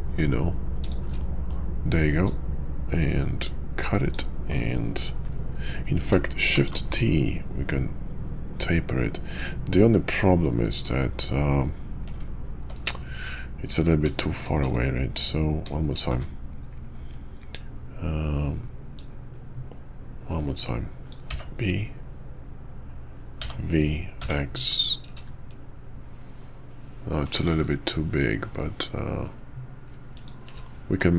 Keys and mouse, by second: 1.2 middle drag, 14.6 `, 16.1 `, 18.9-30.3 drag, 30.6-31.0 middle drag.